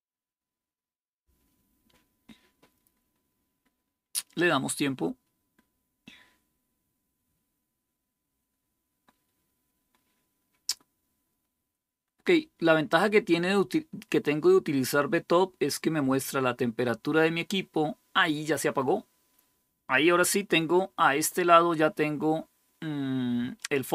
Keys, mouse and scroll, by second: 23.3 click.